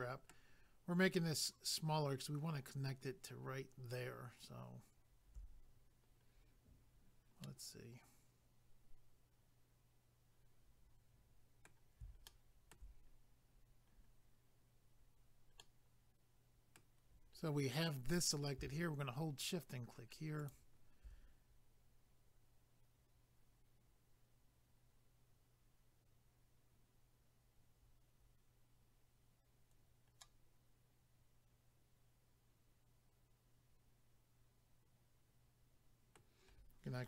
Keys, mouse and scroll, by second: 6.2 scroll down 2, 7.4 middle click, 12.3 shift+middle click, 13.5 scroll up 1, 15.6 middle click, 17.4 scroll down 1, 20.4 shift+click, 20.5 shift+click, 30.2 middle click.